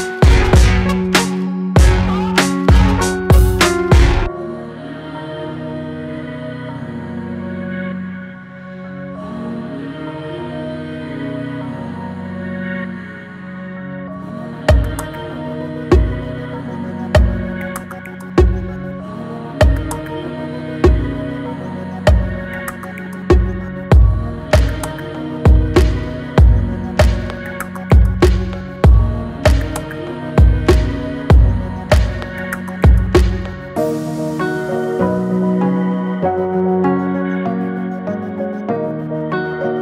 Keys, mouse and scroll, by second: 0.9 s, 3.6 alt+middle click, 4.0 shift+middle click, 4.7 g, 6.8 alt+middle click, 7.7 g, 8.9-9.2 middle drag, 9.2 drag, 9.6-10.3 middle drag, 10.3 click, 11.7 s, 15.1 click, 15.4 click, 16.1 click, 16.8 click, 18.3 e, 27.4 scroll down 1, 27.7 middle click, 28.4-29.0 scroll up 2, 29.0 Tab, 30.0 s, 31.5-32.1 middle drag, 32.1 drag, 32.4-33.9 middle drag, 33.9 click, 34.2 Tab, 35.9 s, 37.2 scroll up 1, 37.8 alt+click, 38.3 alt+click, 39.0 alt+click.